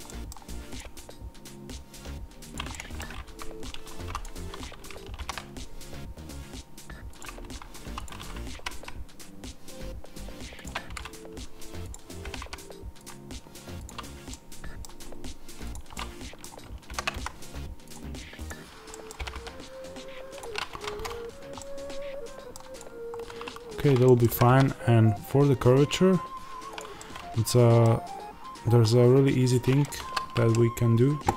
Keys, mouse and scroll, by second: 0.0 middle click, 0.7 click, 0.7 g, 2.5 click, 2.6-4.0 middle drag, 3.2 3, 3.9 2, 4.0-5.1 drag, 5.1 ctrl+b, 7.1 click, 7.7 1, 7.9 click, 8.4 g, 10.5 click, 12.2 g, 12.9 click, 14.2-15.6 middle drag, 14.9-15.6 scroll up 2, 15.6 click, 15.8-17.8 middle drag, 16.8 ctrl+b, 17.8 click, 18.8-20.3 middle drag, 19.1 g, 20.3 click, 20.7 Tab, 21.1 scroll down 1, 21.5-22.7 middle drag, 22.7 click, 23.0-24.0 scroll up 2, 24.0-26.7 middle drag, 24.2 g, 26.7 click, 26.9-31.3 middle drag, 28.3 scroll.